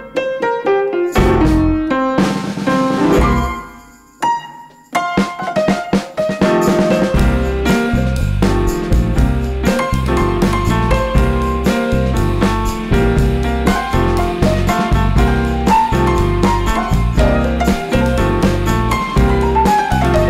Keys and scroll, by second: 0.3 ⟳, 1.4 super+e, 1.7 super+=, 2.4 super+x, 2.7 super+z, 3.7 super+x, 6.0 super+z, 7.9 super+-, 9.2 super+z, 13.5 super+u, 14.7 alt+shift+super+n.